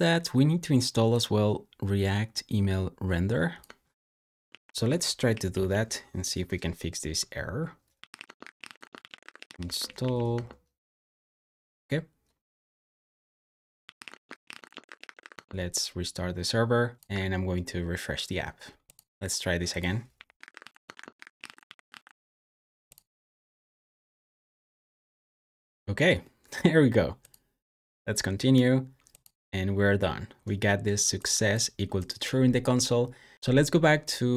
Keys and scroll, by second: 4.3 super+c, 5.3 ctrl+c, 5.5 ctrl+c, 7.7-9.9 typing, 10.2 Return, 13.4-17.9 typing, 19.8-22.2 typing.